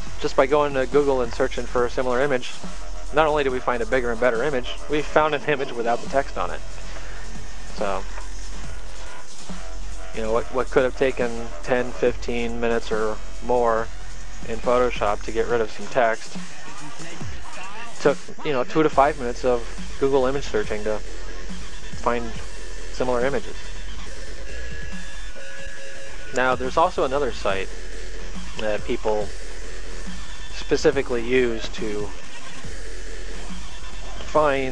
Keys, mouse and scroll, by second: 1.3 click, 9.8 click, 16.8 click, 18.0 click, 20.6 click, 22.8 click, 24.9 click, 28.0 click, 29.6 click, 31.0 click, 32.8 right click, 34.1 click.